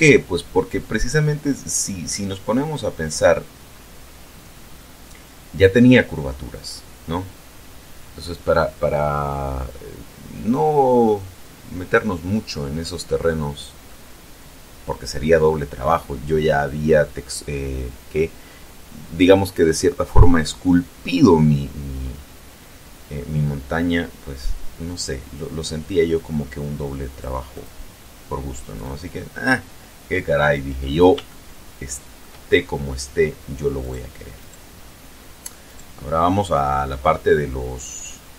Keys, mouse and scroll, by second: 3.5 scroll up 1, 13.4 scroll down 1, 14.4 scroll down 1, 26.9 click, 27.4 click, 28.6 click, 31.2-32.2 shift+middle drag, 33.6 right click, 34.2 right click, 35.5 right click.